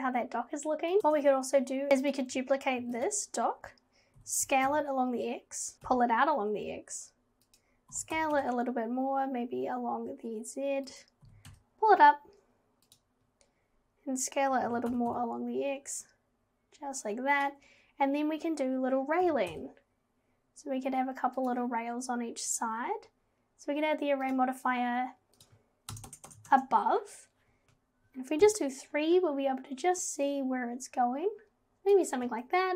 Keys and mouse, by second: 0.9 click, 1.0 Tab, 2.8 shift+d, 4.2 g, 5.7 g, 7.9 g, 11.3 g, 14.7 g, 19.3 g, 24.4 drag, 25.5-26.5 drag, 26.3 Tab, 28.4 KP_3, 30.1-32.0 drag.